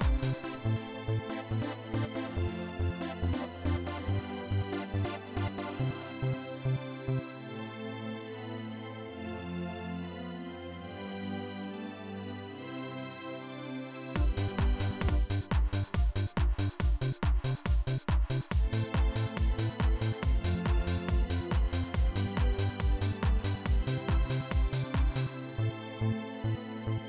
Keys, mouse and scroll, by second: 3.4-6.2 drag, 8.0 click, 13.8 click, 14.8 click, 17.8 right click, 18.3 right click.